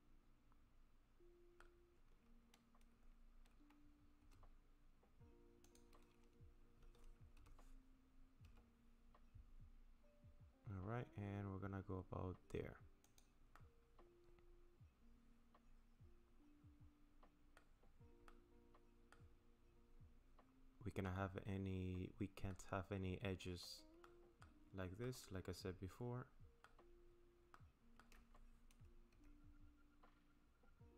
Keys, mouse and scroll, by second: 4.2 r, 7.4 g, 13.6 middle click, 17.8-18.3 scroll up 3, 18.3 middle click, 19.3-19.9 scroll up 3, 19.9 scroll down 1, 21.1 middle click, 24.0 middle click, 24.7-25.2 scroll down 2, 25.0 middle click, 27.6 middle click, 29.1 r.